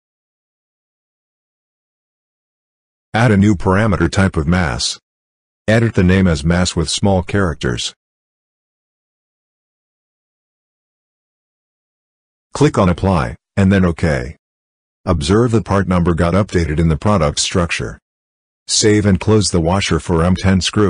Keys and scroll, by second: 0.1 l, 7.5-8.9 typing.